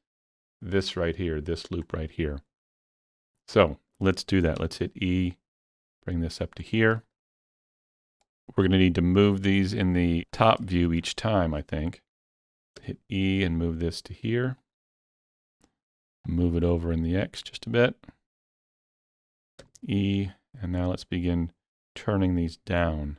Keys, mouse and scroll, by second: 0.5 shift+middle click, 4.6 shift+middle click, 4.7 e, 6.0 scroll up 2, 6.3-12.8 shift+middle drag, 7.5-14.6 drag, 12.8 e, 16.3-21.8 drag, 19.6 e.